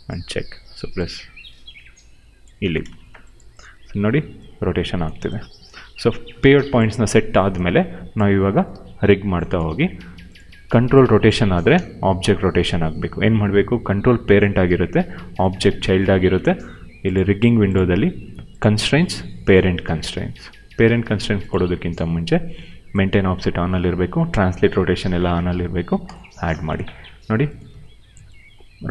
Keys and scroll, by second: 2.5 space, 3.6 e, 5.1 ctrl+z, 8.6 w, 10.4 e, 11.3 ctrl+z, 11.6 q, 27.6 e.